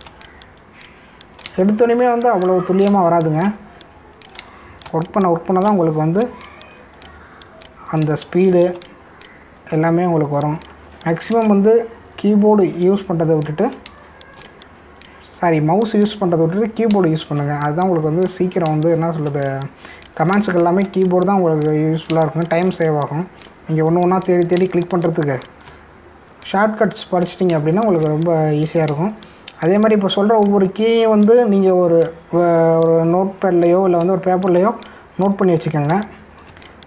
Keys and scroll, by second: 0.6 space, 2.4 space, 9.0 space, 12.4 ctrl+alt+z, 14.9 space, 17.9 space, 19.6 space, 23.1 space, 25.7 space, 28.5 space, 35.0 space.